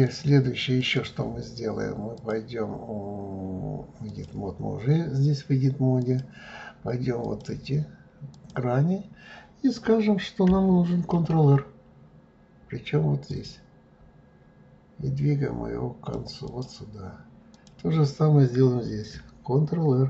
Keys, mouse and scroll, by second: 0.1 click, 0.8 click, 2.2-5.2 drag, 6.0 click, 7.2 click, 8.3 click, 11.2 ctrl+r, 17.5 click.